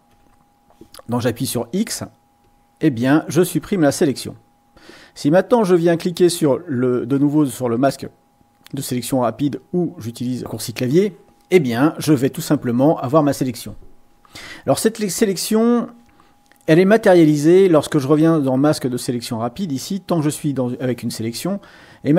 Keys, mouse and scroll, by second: 0.1 x, 2.4-3.5 drag, 9.4 click, 19.2 click.